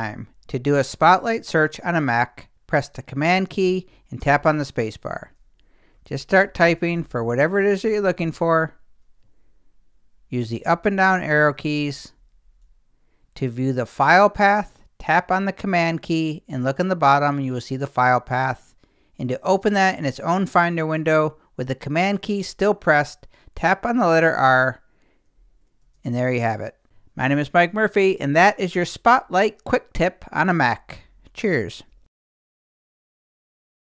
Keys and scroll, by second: 4.2 super+space, 5.8-8.8 typing, 10.2 Down, 11.6 Up, 24.3 super+r, 25.7 Down, 25.8 space, 31.9 space.